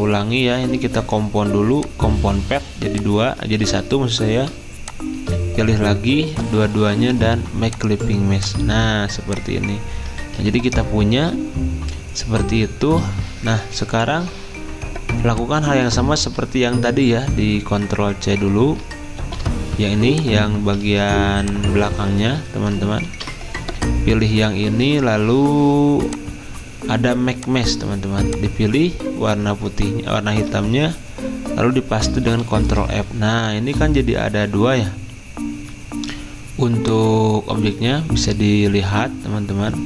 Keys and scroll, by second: 3.5 ctrl+z, 10.2 ctrl+z, 16.2 ctrl+z, 19.2 ctrl+c, 20.8 ctrl+z, 32.2 ctrl+f.